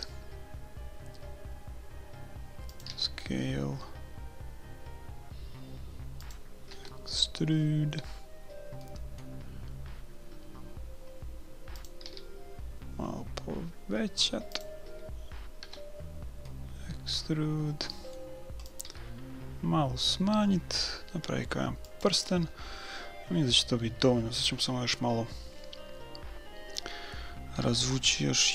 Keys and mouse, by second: 2.9 s, 6.7 e, 12.0 s, 15.6 e, 18.9 s, 22.8-25.7 middle drag, 27.7 e.